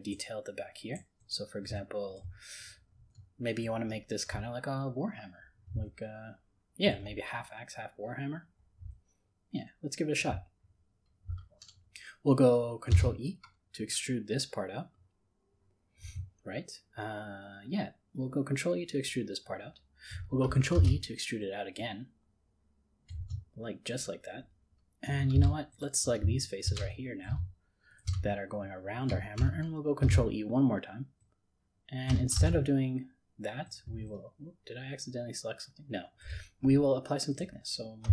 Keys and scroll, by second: 12.9 ctrl+e, 20.7 ctrl+e, 30.1 ctrl+e, 32.4 ctrl+z.